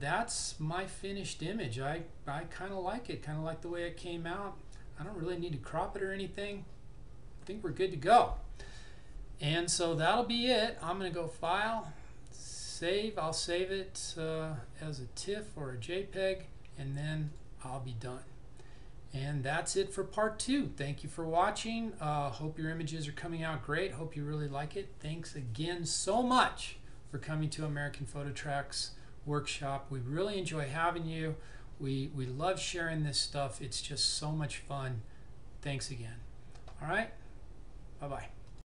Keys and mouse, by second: 11.5 click, 17.4 click, 38.6 click.